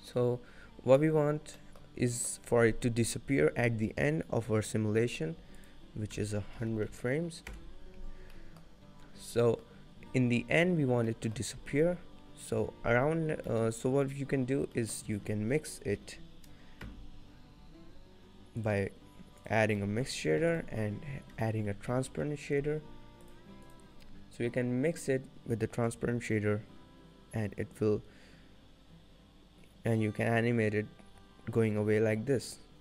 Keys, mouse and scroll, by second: 0.5 scroll down 1, 1.5-1.9 scroll up 4, 1.7 middle click, 2.2 shift+middle click, 2.2-2.6 scroll down 1, 5.8 click, 7.1 0, 8.5 middle click, 8.8-9.2 scroll up 7, 9.5 middle click, 9.5 scroll up 5, 11.2 middle click, 13.2-13.5 scroll down 3, 13.7 middle click, 14.6-15.3 scroll up 2, 14.9 middle click, 15.3 shift+a, 20.1 middle click, 20.2-20.9 scroll up 3, 20.6 shift+a, 24.6 click, 26.0 click.